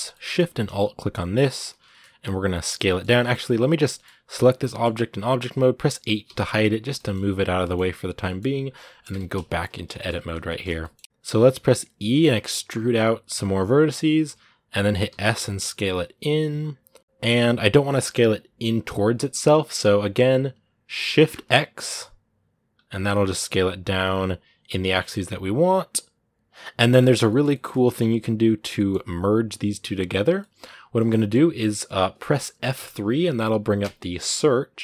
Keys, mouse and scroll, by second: 1.4-2.6 alt+shift+right drag, 2.6 middle click, 3.0 Tab, 3.4 right click, 3.7 middle click, 4.3 scroll down 2, 4.5-6.0 middle drag, 6.0 h, 6.7 middle click, 7.1 right click, 7.4-8.9 middle drag, 8.9 Tab, 9.2 shift+middle click, 9.5 scroll up 1, 9.7 shift+middle click, 10.6 scroll up 1, 10.9 shift+middle click, 11.0 s, 26.5-27.8 middle drag, 27.8-28.6 scroll up 1, 28.6-34.8 middle drag.